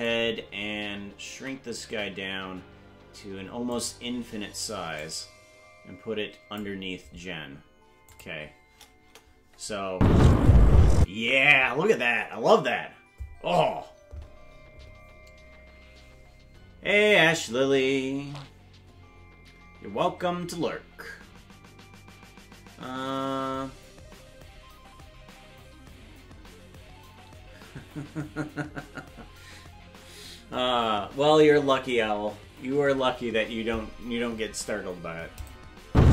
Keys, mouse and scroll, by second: 1.3 s, 5.0-6.6 drag, 8.1 click, 9.0 KP_0, 9.9 space, 11.0 space, 35.4 click, 35.8 space.